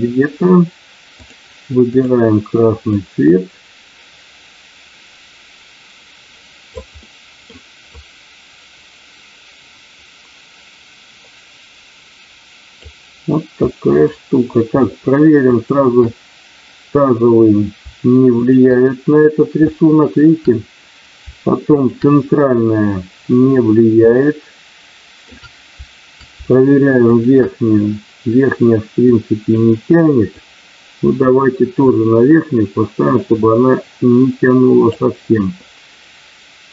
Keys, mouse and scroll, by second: 1.2 click, 2.9-6.7 drag, 6.9 middle click, 7.9-12.8 drag, 13.7 middle click, 15.4 shift+click, 18.3 shift+click, 19.7 shift+middle click, 21.7 shift+click, 24.2-25.3 shift+middle drag, 27.0 shift+click, 29.0 click, 30.3-34.8 drag.